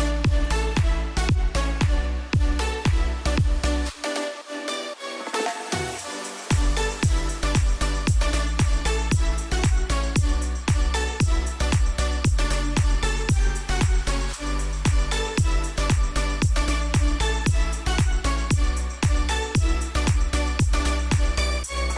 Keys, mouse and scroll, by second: 1.1 a, 2.3 click, 7.0 Left, 11.5 click, 13.9 click, 15.9 Left, 16.5 click, 20.4-21.9 drag.